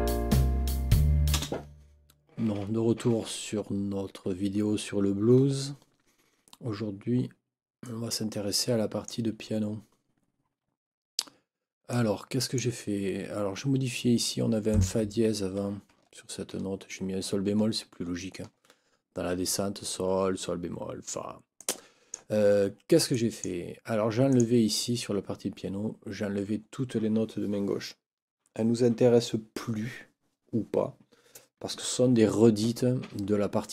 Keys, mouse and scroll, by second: 1.3 space, 7.8-9.2 drag, 11.9 click, 14.7 click, 16.1 ctrl+scroll up 2, 18.0 ctrl+scroll down 2, 21.6 click, 23.1 click, 24.3 click.